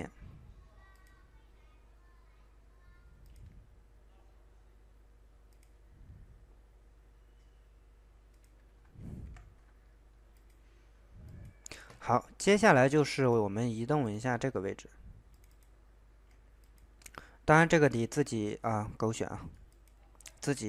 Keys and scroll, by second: 9.2 Escape.